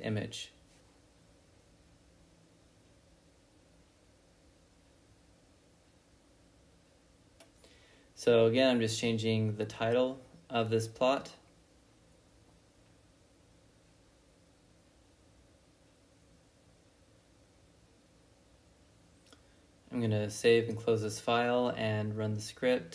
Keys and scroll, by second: 1.3-2.9 typing, 3.4 Return, 4.0-7.1 typing, 8.4-11.3 typing, 12.9 shift+r, 13.1 s, 13.3 Tab, 14.5 typing, 15.0 Tab, 15.5 Return.